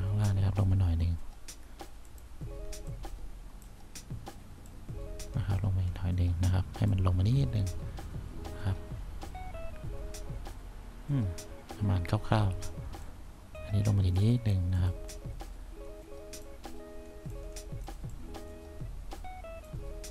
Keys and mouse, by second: 3.1 click, 4.8-7.1 drag.